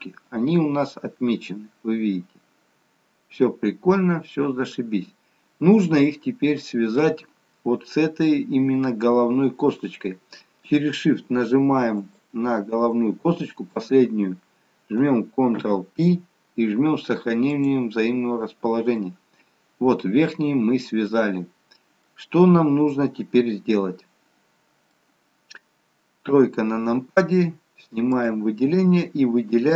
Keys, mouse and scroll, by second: 12.2 shift+click, 15.9 ctrl+p, 18.7-19.4 scroll down 2, 19.1 middle click, 22.7 middle click, 26.4 KP_3, 28.3 click.